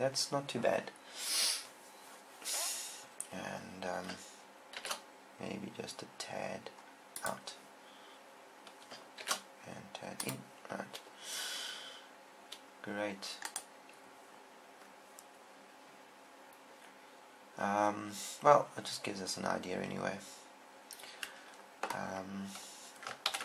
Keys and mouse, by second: 5.2 shift+f, 7.6-9.5 drag, 9.6 shift+f, 10.7-12.4 drag, 13.8-15.6 right drag, 18.6 middle click.